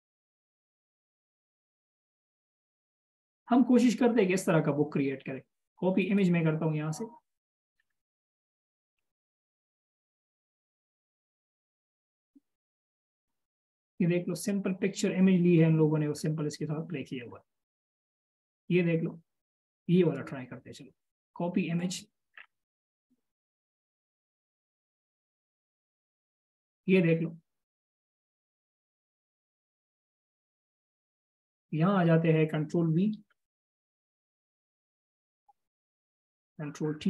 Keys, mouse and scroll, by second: 4.1 right click, 8.2 scroll down 1, 10.6-11.7 scroll down 1, 13.2-13.8 scroll down 1, 16.5 scroll down 1, 17.1 scroll down 1, 21.0 right click, 22.8 scroll down 1, 23.5 scroll down 1, 24.2-24.9 scroll down 1, 26.8-28.7 scroll up 1, 33.6 ctrl+v.